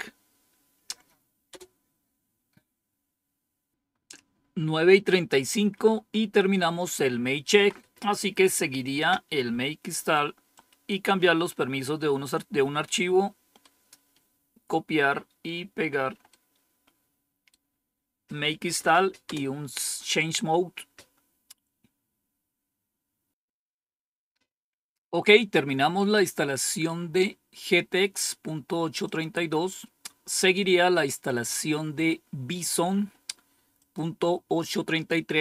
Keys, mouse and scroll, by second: 1.4 Return, 5.6 Up, 7.4 Down, 10.4-12.8 drag, 13.5-15.3 right drag, 16.2-18.1 right drag, 19.2 Return, 28.9 click, 33.7 click.